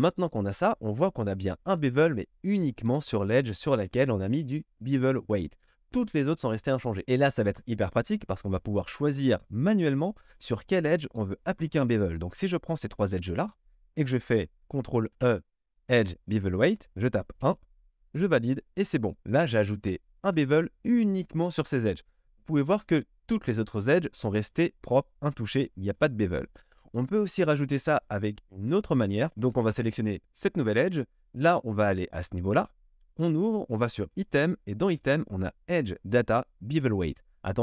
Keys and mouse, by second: 9.1 middle click, 9.9 shift+click, 10.1-11.3 middle drag, 11.3 shift+click, 11.8-30.4 middle drag, 15.0 ctrl+e, 29.3 ctrl+z, 30.4 click, 30.4-32.5 middle drag, 32.5-34.2 drag, 34.2-37.6 middle drag.